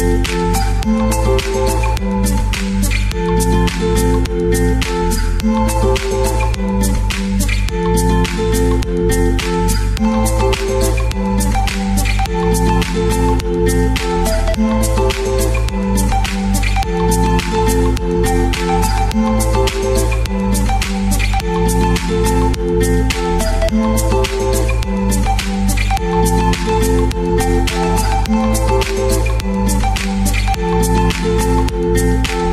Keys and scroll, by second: 6.4 shift+Left, 6.5 shift+Left, 14.6 Down, 31.9 space.